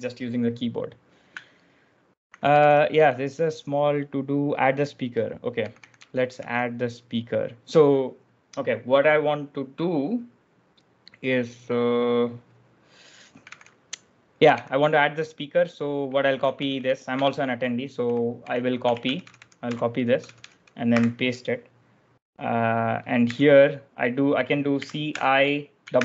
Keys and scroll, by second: 2.1-3.4 typing, 5.2-6.7 typing, 13.0-14.4 typing, 16.1-21.3 typing, 23.1 j, 24.4-25.9 typing.